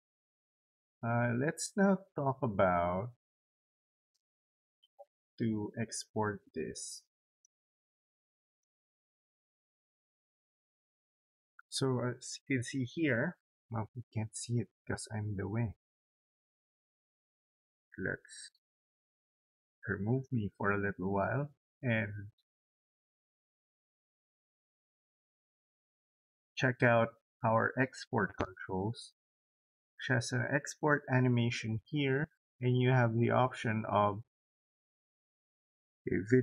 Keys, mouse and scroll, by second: 0.5 click, 7.0 click, 8.2 click, 18.9 click, 25.6 click.